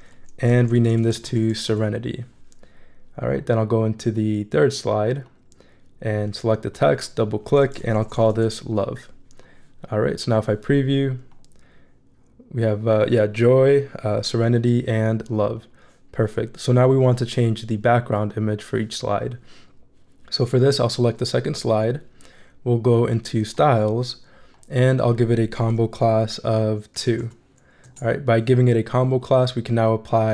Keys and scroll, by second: 0.4-2.2 typing, 7.8-8.9 typing, 26.7-27.7 typing, 27.8 Return.